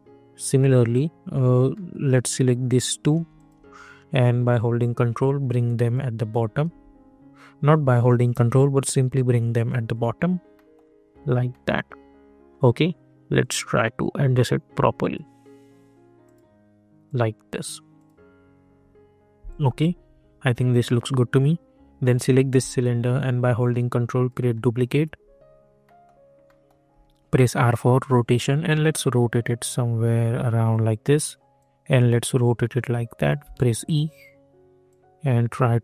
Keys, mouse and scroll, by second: 1.7 middle click, 2.9 click, 3.9 scroll up 1, 4.7-6.6 ctrl+drag, 6.6 ctrl+z, 8.2-10.5 drag, 10.5 middle click, 13.3-16.2 drag, 22.0 click, 23.6-25.8 ctrl+drag, 25.8 middle click, 26.9 r, 28.1-33.4 drag, 33.4 e, 34.0 scroll up 1, 34.8-35.8 drag.